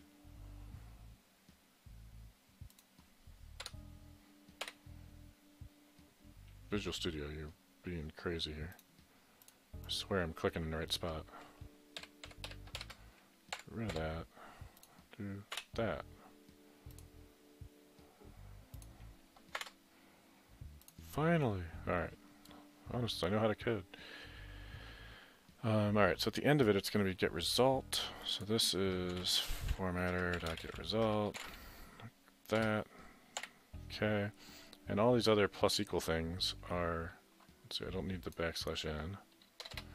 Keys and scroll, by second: 3.7 Right, 4.6 Right, 12.0 Down, 12.8 Down, 12.8 Up, 13.5 Delete, 13.9 Return, 29.5-32.6 typing, 33.4 Delete, 39.6 BackSpace, 39.7 BackSpace.